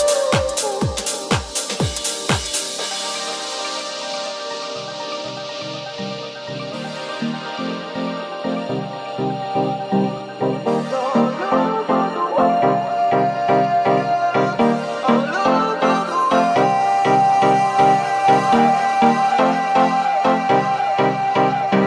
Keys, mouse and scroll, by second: 0.9-21.8 shift+middle drag, 2.6 w, 4.5 s, 6.4 e, 11.7 ctrl+z, 12.3 s, 18.6 e, 20.4 s.